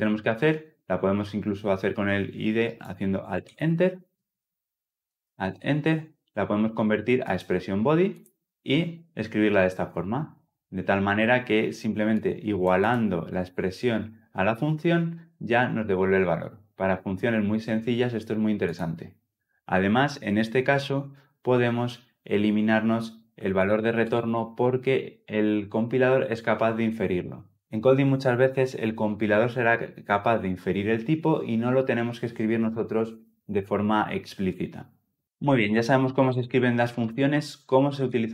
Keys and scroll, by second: 4.1 Escape, 5.1 alt+Return, 23.4 alt+Return, 26.6 alt+Return, 37.6 ctrl+z, 38.1 ctrl+z.